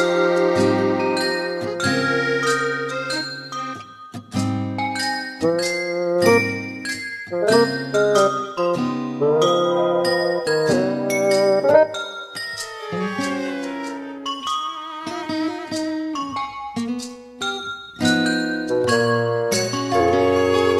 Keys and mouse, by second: 0.3 middle click, 1.1 middle click, 2.4 middle click, 3.1 middle click, 3.7 middle click, 4.1 middle click, 13.8 middle click, 14.8 middle click, 15.1 middle click, 15.8 middle click, 16.4 middle click, 17.8 right click, 18.6 middle click.